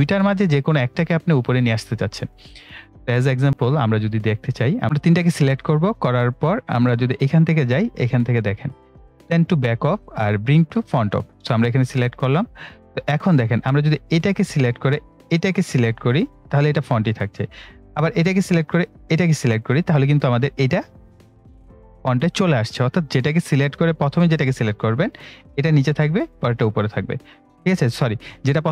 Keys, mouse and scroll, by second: 3.5 click, 4.1-4.5 scroll down 1, 4.5 scroll up 1, 4.8-9.7 drag, 11.3 click, 14.1 click, 17.9 click, 25.0 click.